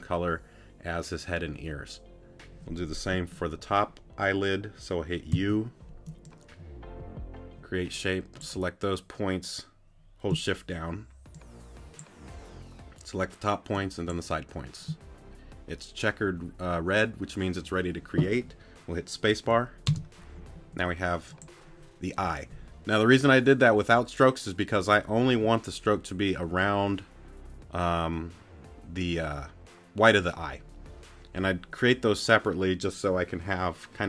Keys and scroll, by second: 5.3 u, 19.9 space.